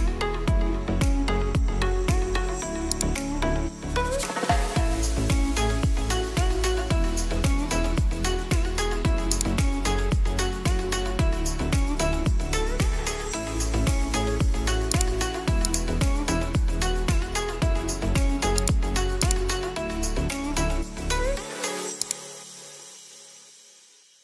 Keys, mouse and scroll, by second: 2.7-9.2 drag, 2.7 typing, 10.5-11.7 ctrl+alt+scroll down 1, 12.3 ctrl+alt+scroll up 1, 14.7 click, 18.3 click, 21.8 click, 21.8 typing.